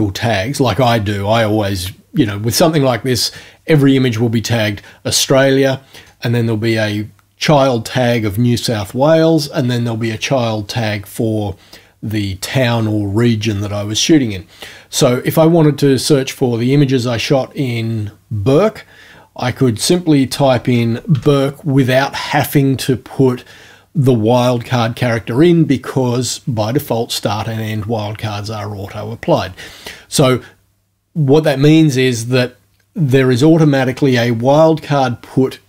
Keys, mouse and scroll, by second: 19.9 click, 20.1-21.7 typing.